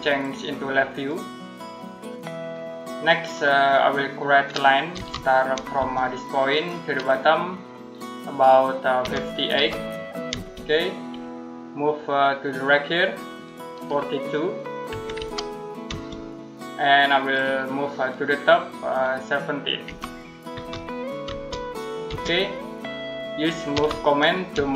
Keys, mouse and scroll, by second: 3.5 middle click, 4.8 l, 5.6 space, 6.3 click, 8.8-10.1 typing, 14.7-15.7 typing, 19.7-21.1 typing, 22.4 middle click, 23.6 m, 24.4 space.